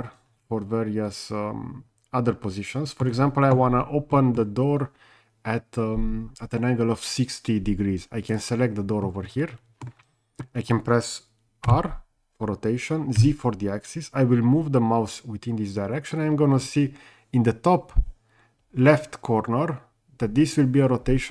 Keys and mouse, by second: 4.1 middle drag, 8.3 click, 9.1-9.8 middle drag, 11.7 r, 13.2 z.